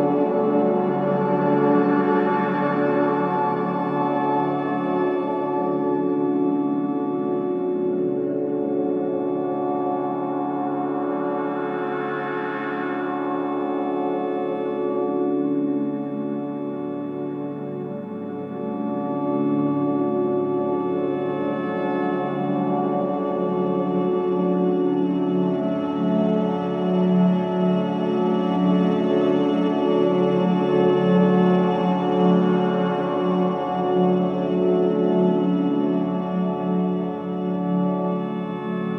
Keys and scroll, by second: 9.5 3, 9.7 ], 9.9 F1, 10.1 F2, 13.0 ctrl+z.